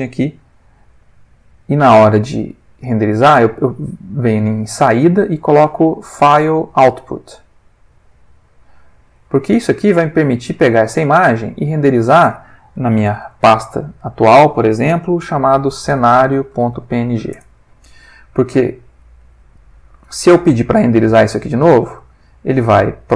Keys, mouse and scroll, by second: 0.8 shift+a, 8.0 click, 9.1 click, 9.5 ctrl+middle click, 10.7-11.9 drag, 12.0 click, 13.1 /, 15.7-17.1 typing, 17.3 Return, 18.6 middle click, 19.4 ctrl+middle click, 21.7 click.